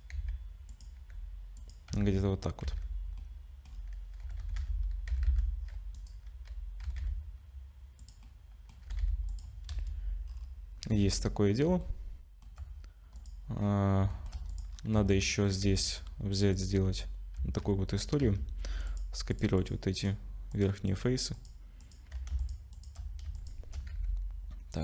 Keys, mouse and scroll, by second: 0.1 s, 0.9 g, 1.9 z, 2.6 z, 3.2 middle click, 3.7-4.2 scroll down 4, 4.2 g, 6.8 g, 8.2 middle click, 8.8 g, 9.7 KP_0, 10.2-10.8 scroll down 7, 10.9 ctrl+s, 11.8 shift+middle click, 13.1 click, 13.6-14.0 scroll up 3, 14.1 shift+middle click, 14.5 click, 14.7-15.6 scroll up 6, 14.9 Tab, 15.6 3, 15.7 click, 16.5 ctrl+click, 17.3 z, 18.2 z, 19.3 ctrl+click, 19.6 ctrl+click, 19.9 ctrl+click, 20.5 ctrl+click, 21.3 ctrl+click, 21.3 ctrl+click, 21.8 ctrl+click, 22.4-23.7 shift+click, 22.7 shift+click, 23.3 ctrl+click, 23.9 g.